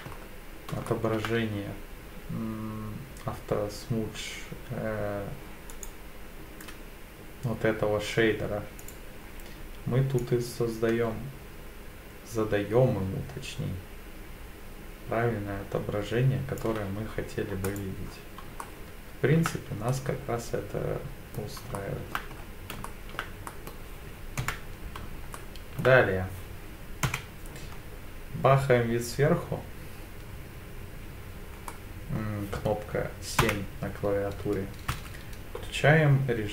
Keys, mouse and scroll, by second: 0.1-0.7 scroll up 3, 0.9 shift+middle drag, 5.7-8.7 right drag, 8.8 click, 10.2-16.6 drag, 17.7 click, 18.1-18.4 scroll down 2, 18.6-19.5 shift+middle drag, 19.9-21.6 middle drag, 21.8-22.2 shift+middle drag, 22.4-22.7 scroll up 2, 22.9 shift+middle drag, 23.5 middle drag, 24.4 KP_7, 25.4-25.8 shift+middle drag, 27.1 KP_7, 31.7-32.2 middle drag, 33.4 KP_7, 34.9 Tab.